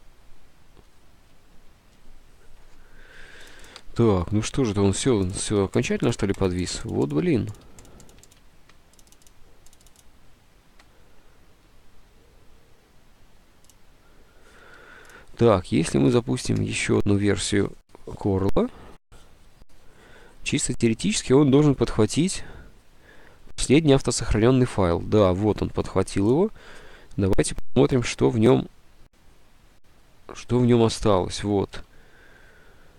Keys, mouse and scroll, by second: 4.5 Escape, 4.6 Escape, 5.7 Escape, 6.1 Escape, 6.6 Escape, 6.8 Escape, 7.0 Escape, 7.3 Escape, 7.4 Escape, 31.9 F4.